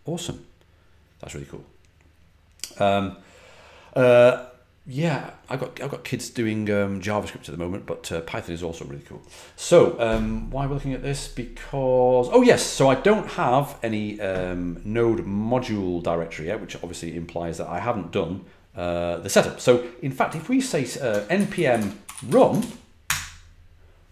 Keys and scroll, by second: 20.2-22.7 typing, 23.0 Return.